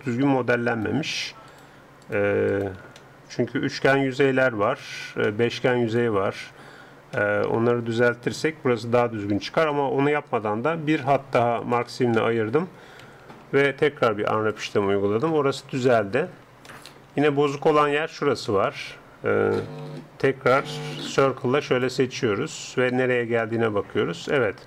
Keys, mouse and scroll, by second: 0.7-3.0 right drag, 3.0-8.7 middle drag, 11.6-13.2 drag, 12.3 middle click, 13.0 a, 13.2 a, 14.0 u, 17.6-20.8 middle drag, 19.8 a, 20.8 c, 23.2-24.6 middle drag.